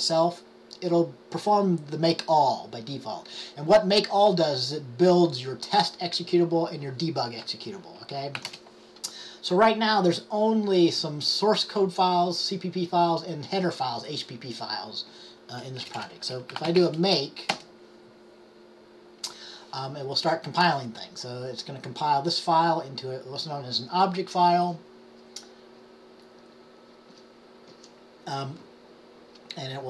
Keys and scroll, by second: 8.5 typing, 16.4-18.1 typing.